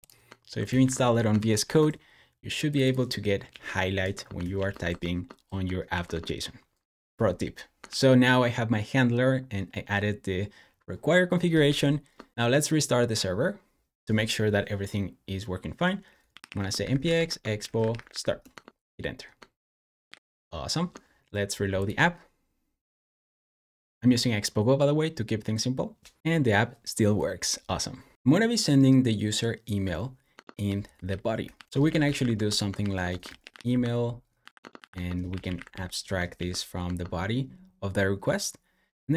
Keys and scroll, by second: 0.7 super+w, 1.5 shift+super+e, 3.2-4.0 typing, 4.4 super+s, 5.7 super+f, 7.8 shift+super+[, 11.5 super+j, 12.1-12.8 typing, 15.9-18.4 typing, 19.9 super+j, 21.9 r, 24.0 typing, 30.2 Escape, 30.2-36.1 typing, 36.2 super+s, 36.7 Escape.